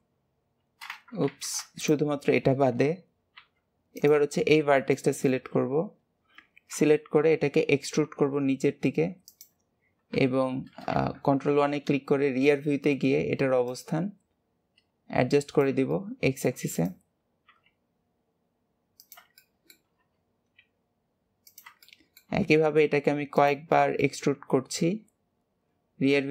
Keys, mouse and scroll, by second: 1.2 ctrl+z, 1.8 shift+click, 3.3 h, 3.9 click, 4.3 scroll up 3, 4.9 shift+middle click, 8.0 e, 10.0 KP_3, 10.9 ctrl+KP_1, 13.6 click, 15.4 click, 15.9 shift+middle click, 16.7 click, 19.3 shift+middle click, 20.0 e, 21.7 shift+middle click, 22.4 e, 23.7 shift+middle click, 24.3 e.